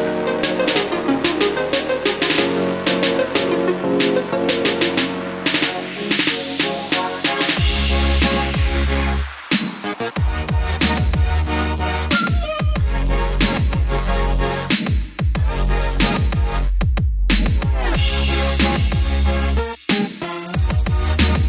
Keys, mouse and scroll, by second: 20.9-21.4 scroll up 1.